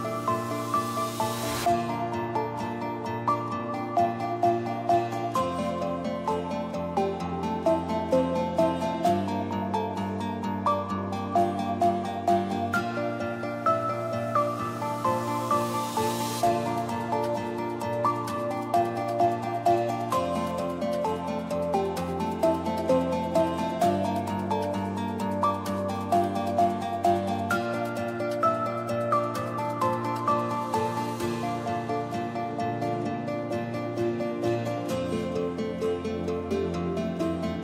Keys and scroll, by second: 7.2 ctrl+z, 16.8 Down.